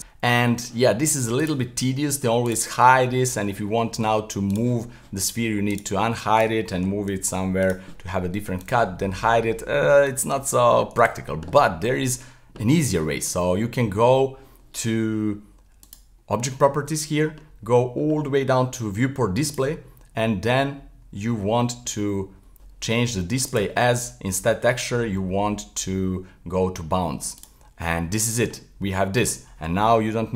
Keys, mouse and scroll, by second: 0.0-1.4 middle drag, 1.4 click, 2.4 click, 4.5 click, 5.7 click, 6.4 right click, 7.1 g, 8.6 click, 9.0-10.1 middle drag, 10.3 z, 10.8 middle click, 11.0 z, 13.1-15.8 middle drag, 15.8 click, 17.3-19.4 scroll down 30, 19.4-20.2 drag, 20.2-20.8 scroll down 1, 20.8-23.4 scroll down 19, 23.4-26.6 drag, 28.2-30.3 middle drag.